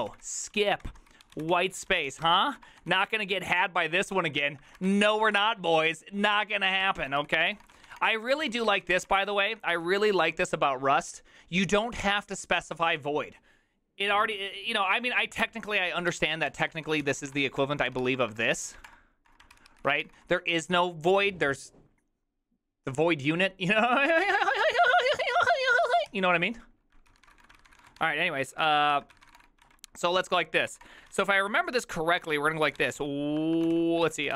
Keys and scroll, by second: 0.0-10.6 typing, 7.0 Return, 12.0 ctrl+c, 16.2 ctrl+c, 16.3-18.7 typing, 18.9 ctrl+space, 19.6 ctrl+c, 19.7 ctrl+c, 19.7-21.3 typing, 27.1-29.4 typing, 29.2 ctrl+c, 29.7 ctrl+d, 30.7 ctrl+c, 30.7-31.1 typing, 31.1 Return, 32.2 Return, 32.5-34.3 typing.